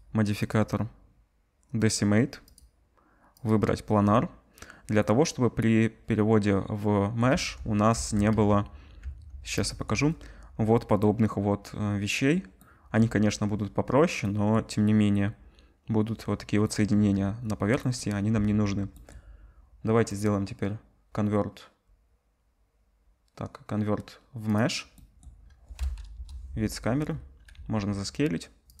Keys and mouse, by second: 0.4-3.4 middle drag, 3.4-20.2 drag, 7.3 Tab, 7.9 Tab, 8.3 z, 9.0 Tab, 16.9 z, 18.3 Tab, 22.9 middle click, 26.1 KP_0, 27.5-28.8 middle drag, 27.5 s.